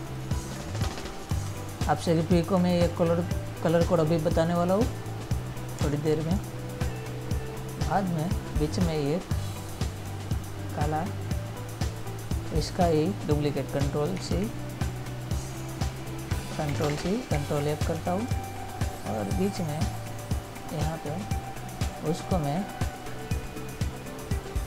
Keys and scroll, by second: 1.6 ctrl++, 6.1 ctrl+-, 14.5 ctrl+c, 17.1 ctrl+c, 17.7 ctrl+f.